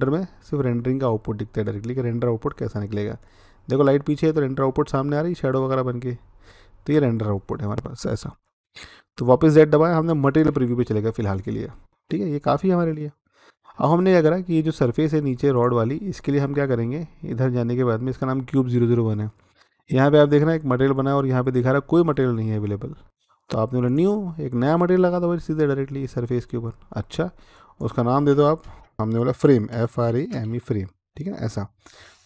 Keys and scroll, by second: 9.1-15.4 z, 29.6-30.3 typing, 31.0 Return.